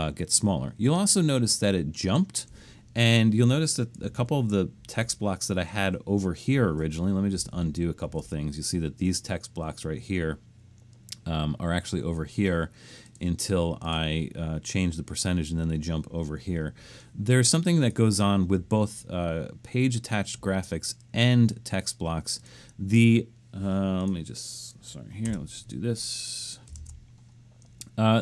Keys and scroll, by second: 4.2 super+=, 7.5 super+z, 8.1 super+z, 25.3 Return, 26.8 shift+Return.